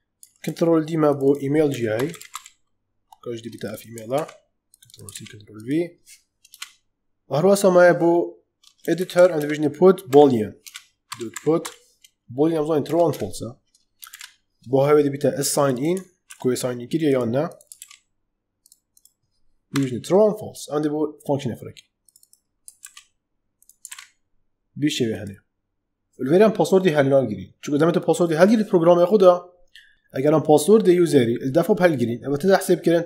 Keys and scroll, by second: 0.4 ctrl+d, 1.3-2.7 typing, 4.1 ctrl+c, 6.4 Return, 8.5-12.0 typing, 12.8 Down, 13.0 Return, 14.0 shift+', 16.2 ctrl+c, 17.7 ctrl+v, 19.6 ,, 22.7 ctrl+c.